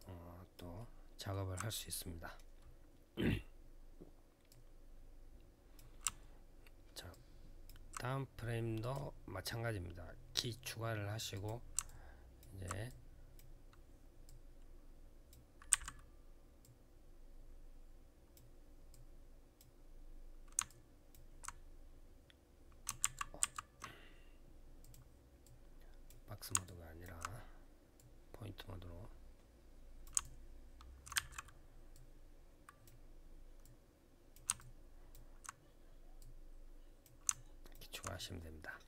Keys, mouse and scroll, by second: 0.5 alt+middle click, 4.2 click, 6.1 alt+scroll down 1, 6.9 alt+click, 8.6 click, 11.1 click, 11.6 alt+click, 12.6 click, 14.0 click, 16.4 click, 18.7 click, 20.4 alt+click, 22.8 ctrl+z, 24.6 click, 25.2 click, 26.4 alt+click, 26.8 click, 27.7 click, 30.0 alt+click, 30.9 e, 31.7 click, 34.3 alt+click, 34.9 click, 35.9 click.